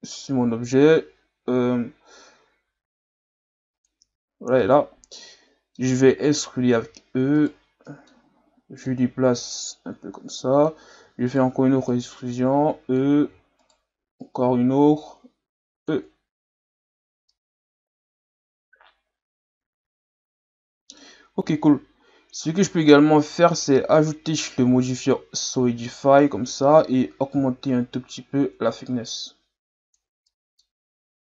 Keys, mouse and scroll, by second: 0.8 click, 3.7 click, 4.6-6.8 middle drag, 6.8 e, 7.9-8.9 middle drag, 8.9-11.0 drag, 11.0 e, 11.9-13.3 drag, 13.3 e, 14.2-16.4 drag, 16.4 Tab, 16.8 a, 17.1 scroll down 1, 17.3-20.3 middle drag, 21.1-23.5 scroll up 2, 25.1 click, 25.9-27.3 middle drag, 27.3-30.3 drag, 30.3-30.9 middle drag, 30.9-31.3 scroll up 1.